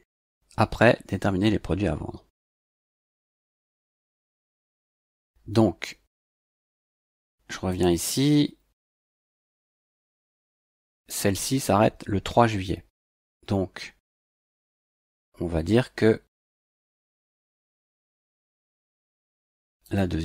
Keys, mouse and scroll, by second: 4.7 click, 7.7 click, 9.5 click, 14.5 click, 17.6 click, 19.8 click.